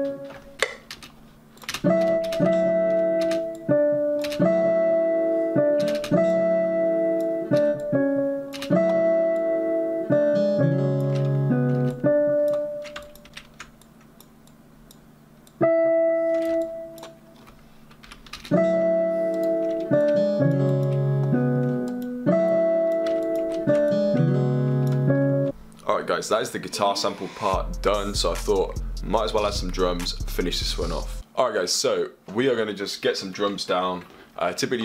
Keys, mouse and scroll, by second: 1.4 F1, 34.1 F1, 34.4 F1.